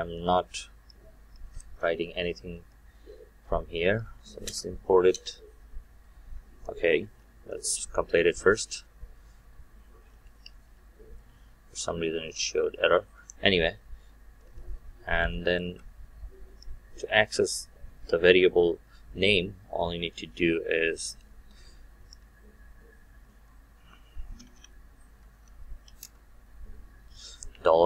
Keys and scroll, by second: 4.5 alt+Return.